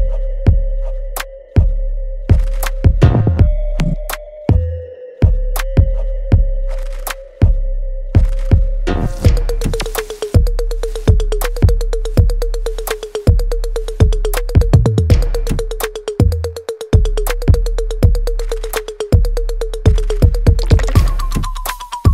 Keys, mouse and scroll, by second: 4.2-14.2 ctrl+drag, 17.0 alt+right click, 17.4 alt+click, 18.0-19.5 alt+middle drag, 19.9 alt+right click, 20.9 click, 20.9-22.1 drag.